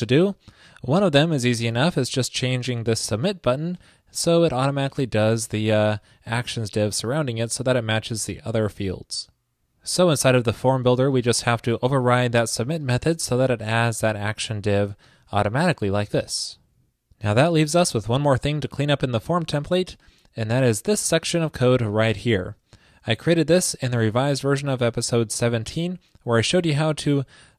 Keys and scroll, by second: 5.8 super+Left, 8.7 super+s, 12.1 super+v, 14.1 super+v, 16.7 super+s.